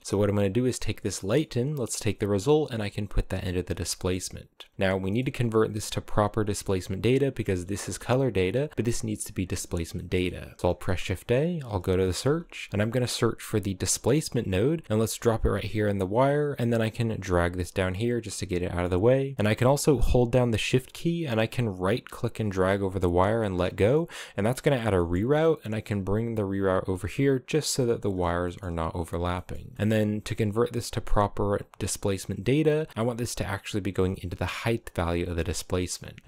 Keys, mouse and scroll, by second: 0.2 click, 0.8 middle click, 1.7 click, 3.4 scroll down 2, 3.6-6.2 shift+middle drag, 6.2-7.1 scroll up 1, 7.1 click, 7.3 g, 8.6 right drag, 8.7 g, 9.6 middle click, 10.4 shift+a, 16.3 click, 17.7 scroll down 3, 17.9-19.3 middle drag, 19.3 scroll up 1, 21.6 shift+right click, 24.1 right click, 24.6 middle click, 25.0 g, 27.6 click, 28.0 scroll down 2, 28.1 middle click, 28.4 a, 28.5-29.7 scroll up 6, 29.2 middle click, 29.7-33.0 middle drag, 33.0 click, 34.9 click, 35.4 middle click, 35.7 scroll up 3.